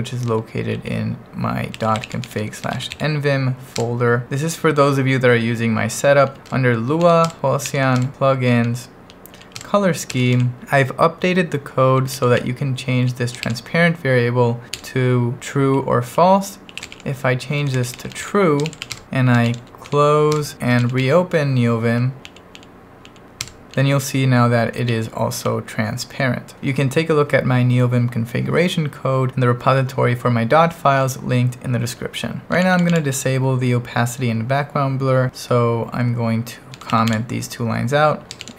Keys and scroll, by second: 0.0-4.2 typing, 3.8 Return, 6.2-10.3 typing, 6.5 Return, 7.3 Return, 8.0 Return, 11.6 j, 12.3 l, 12.9 l, 13.4 shift+v, 14.9 Escape, 16.1-21.5 typing, 20.4 Return, 22.2 Up, 23.5 Return, 24.0-26.0 typing, 32.2-33.0 typing, 36.5-38.5 typing.